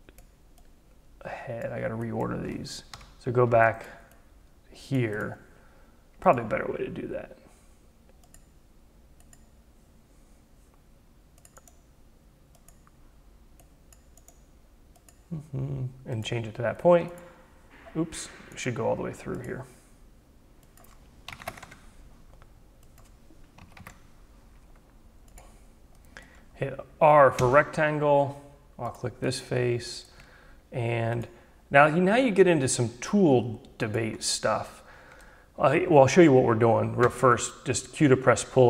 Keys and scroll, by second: 2.4 Delete, 20.8 2, 21.4 5, 21.6 Tab, 23.6 Delete, 23.8 3, 27.4 r, 36.5 q.